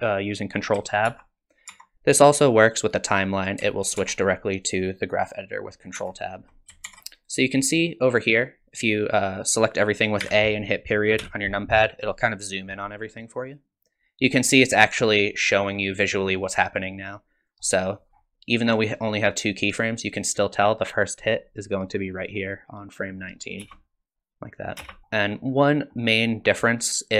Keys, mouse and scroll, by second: 1.1-1.9 ctrl+Tab, 4.0 ctrl+Tab, 6.0 ctrl+Tab, 6.9 ctrl+Tab, 7.9 middle click, 10.2 a, 11.2 KP_Decimal, 13.5 click, 14.5 click, 18.0-19.6 scroll down 4, 20.6 click, 23.0 click, 23.6 space, 24.8 space, 25.0 click, 25.0-25.3 scroll down 2, 25.3 middle click, 26.0-27.1 scroll down 1.